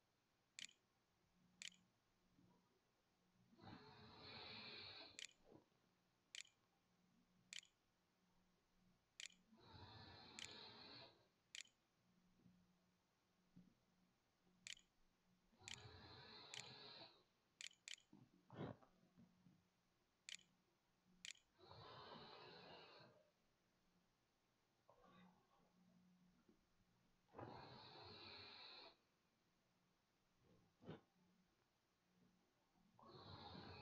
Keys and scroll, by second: 0.0-4.4 typing, 4.7 Tab, 6.1 space, 7.3 t, 8.6-20.8 typing, 23.8 r.